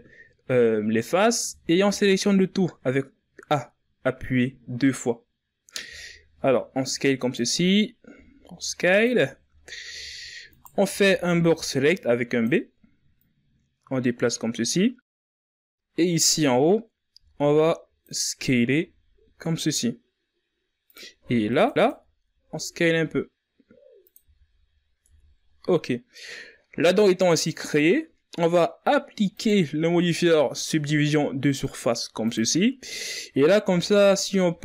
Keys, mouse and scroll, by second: 0.2-0.8 scroll up 3, 1.2 a, 1.6 a, 5.7 s, 7.4-7.7 scroll up 6, 7.9 s, 9.0-9.7 ctrl+scroll down 5, 9.7-10.3 scroll up 1, 10.3 right click, 10.7 b, 13.0-14.8 drag, 14.8-15.1 scroll down 1, 15.1-15.9 shift+scroll up 1, 15.9 right click, 16.9 b, 18.6 s, 21.3 alt+right click, 21.9 s, 23.8 z, 24.2 scroll down 1, 24.6 Tab, 25.1-28.2 scroll down 2, 28.9-32.7 drag, 32.7-33.3 scroll up 5, 33.3 Tab, 34.0 a.